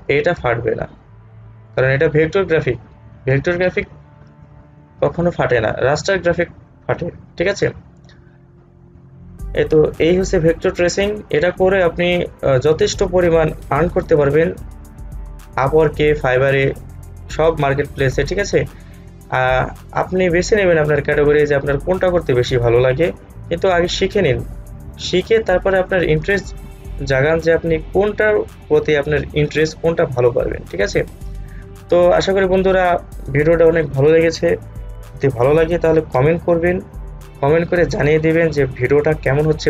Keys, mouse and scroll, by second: 0.3 space, 0.6 space, 0.6-1.2 alt+scroll up 1, 7.7 alt+scroll down 1, 11.2 space, 11.4 click, 11.7 space, 21.3-28.4 drag.